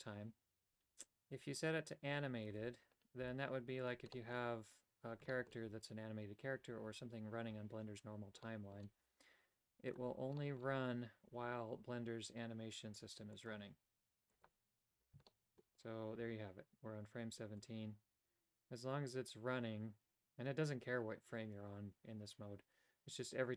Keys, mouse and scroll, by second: 1.6 click, 3.2 g, 4.1 middle click, 5.3 shift+middle click, 8.5 middle click, 9.9 click, 10.3 middle click, 13.3 click, 14.4 click, 15.3 shift+middle click, 17.6-23.5 drag.